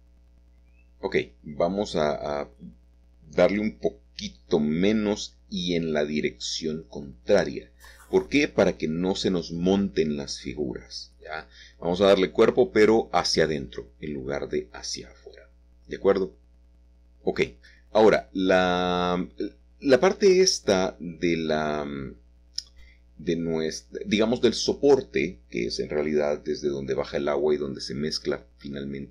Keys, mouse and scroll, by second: 0.0 click, 1.8 Home, 2.3 -, 3.2 Return, 5.1 middle click, 5.7 middle click, 6.1 scroll up 2, 6.5-7.4 scroll down 1, 8.9 Tab, 10.7 middle click, 11.7 middle click, 12.4-12.9 scroll down 1, 12.9 scroll down 1, 13.0-14.9 middle drag, 15.6-16.4 scroll up 3, 17.1 click, 20.3 c, 21.4 Escape, 21.7 3, 22.2 c, 22.6-23.7 drag, 23.7 Escape, 24.5 shift+click, 24.8 shift+click, 26.3 g, 27.9 x.